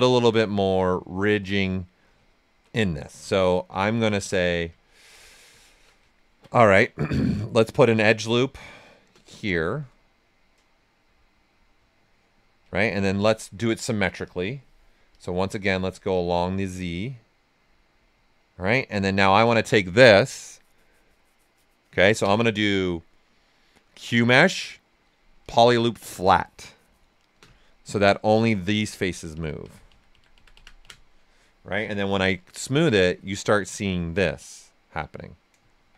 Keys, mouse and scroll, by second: 1.2 shift+f, 2.2 ctrl+right click, 3.0 shift+f, 4.4 right click, 8.3 space, 9.4 click, 13.1 x, 14.2 click, 18.6 right click, 22.2 space, 25.4 click, 28.1-32.0 drag, 32.0 d, 32.6 shift+f, 33.0 ctrl+right click, 33.5 right click, 35.8 shift+f.